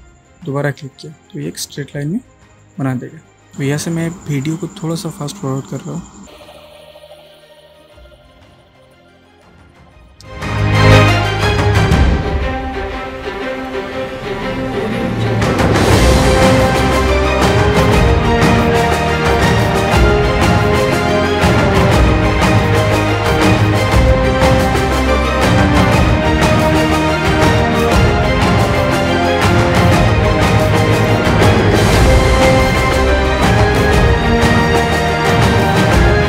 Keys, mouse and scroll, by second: 0.7 shift+click, 2.3-3.5 click, 6.2 click, 6.3 space, 6.4 click, 6.5 space, 7.3-7.8 click, 8.0-8.9 drag, 10.2 ctrl+z, 10.5-10.8 drag, 13.3 space, 13.4 click, 13.5 space, 14.1 click, 14.4-14.7 alt+right click, 14.8-15.3 click, 15.6-16.7 drag, 18.1 space, 18.1 drag, 19.7 click, 20.7 space, 21.0 click, 21.4 space, 21.4 click, 21.5 space, 21.7 click, 23.5 space, 23.6 click, 23.7 space, 23.8-24.1 click, 25.3 space, 25.4 click, 25.5 space, 25.7 click, 27.5 space, 27.6 click, 27.6 space, 27.9-28.4 drag, 30.7 space, 30.8 click, 30.9 space, 31.1 ctrl+click, 31.7 ctrl+click, 31.8 space, 31.9 click, 32.1 ctrl+click, 32.5-33.7 drag.